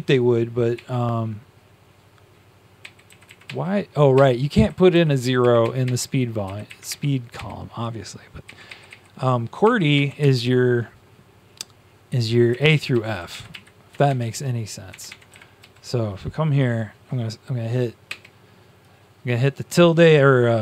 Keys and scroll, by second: 0.7 `, 2.9-5.8 typing, 3.4 Up, 8.1-10.6 typing, 12.1 Down, 12.8 Down, 13.0 Down, 14.0 Up, 14.0 shift+Tab, 14.8 Tab, 15.0 Tab, 15.5 Up, 18.0 `.